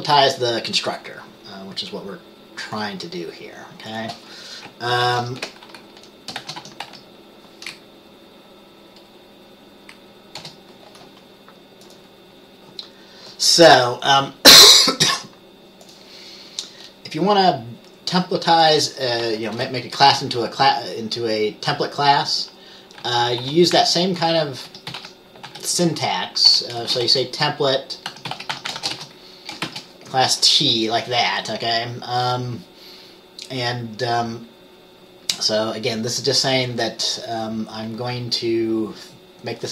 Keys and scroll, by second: 5.2 ctrl+x, 5.3 ctrl+f, 6.5-7.1 typing, 10.5 Return, 19.7 Return, 23.1-27.2 typing, 28.2-29.8 typing.